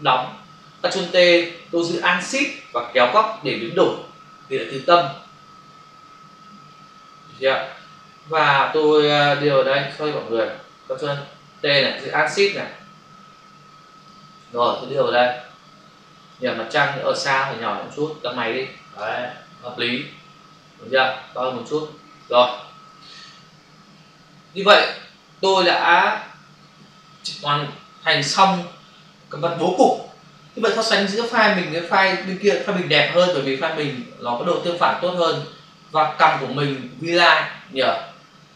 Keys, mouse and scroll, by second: 1.1 ctrl+t, 10.2 Escape, 12.4 alt+click, 14.7 click, 17.0 alt+click, 22.8 Return, 23.9 click.